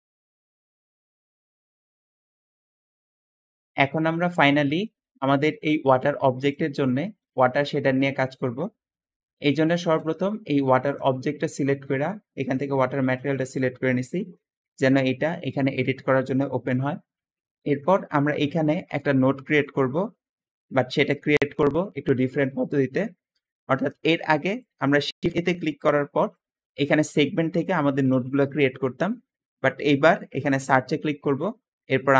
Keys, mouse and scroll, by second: 5.2 g, 9.7 g, 9.7 g, 15.7 middle click, 24.7 shift+a, 24.8 shift+a.